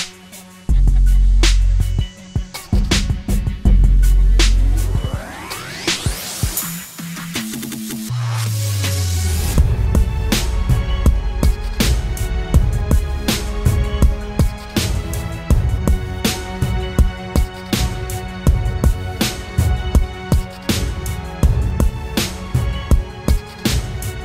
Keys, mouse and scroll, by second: 2.1 ctrl+t, 3.3 alt+shift+click, 7.5 alt+shift+click.